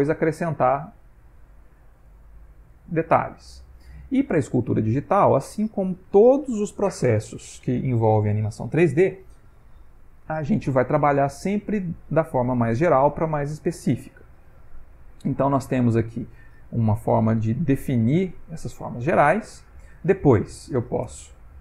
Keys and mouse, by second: 1.0 click, 2.1 click, 2.8 click, 3.1 middle click, 4.2 click, 4.8 click, 5.4 middle click, 15.7 click, 16.7 click, 17.3 click, 17.9 click, 18.3 click, 18.9 click, 19.4 click, 21.1 shift+space.